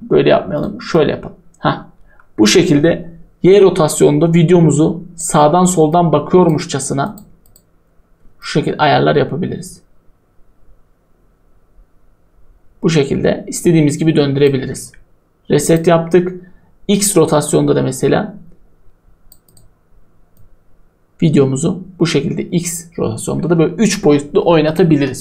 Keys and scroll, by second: 25.0 o.